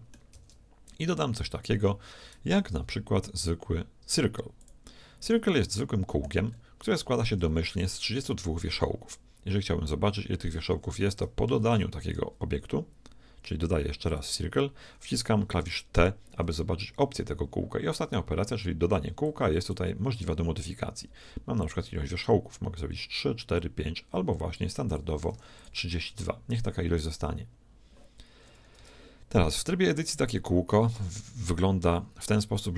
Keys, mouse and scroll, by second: 0.4 shift+a, 5.7-8.6 middle drag, 7.3 Tab, 10.6 Tab, 11.0 x, 11.6 shift+a, 16.1 t, 19.2-21.2 drag, 21.6-23.4 drag, 24.9-26.9 drag, 28.8 Tab, 30.9-32.7 middle drag.